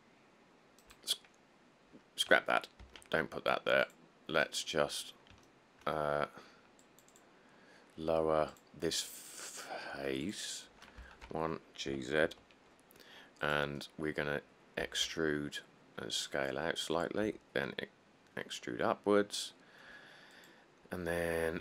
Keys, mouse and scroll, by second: 3.0 ctrl+z, 5.4 middle click, 11.2 1, 12.1 g, 12.5 z, 14.0 middle click, 14.1 middle click, 15.0 e, 15.2 s, 17.4 e.